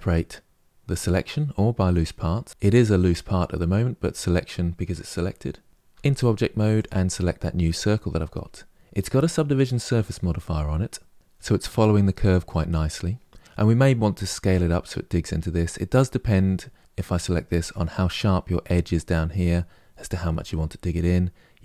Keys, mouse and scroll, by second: 5.7 Tab, 6.5 click, 11.1-13.3 middle drag, 15.3-16.7 middle drag, 16.7 drag, 16.8-17.3 middle drag, 17.3 Tab.